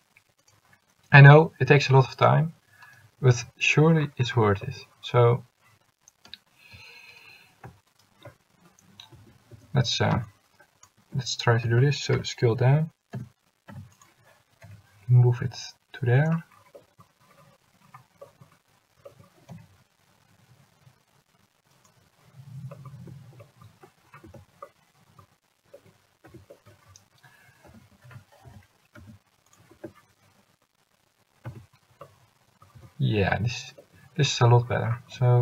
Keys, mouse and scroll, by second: 9.3 a, 9.6 a, 10.4 c, 11.8 s, 14.8 g, 19.7 g, 24.4 Tab, 26.4 Tab, 27.8 s, 31.6 Tab, 32.8 Tab, 35.3 g.